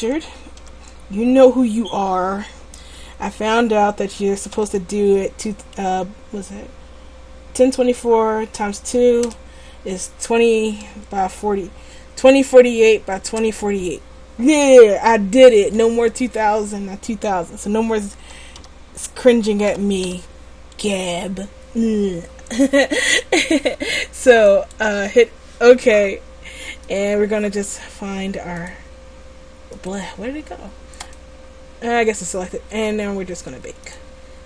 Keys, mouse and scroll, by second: 34.0-34.4 drag.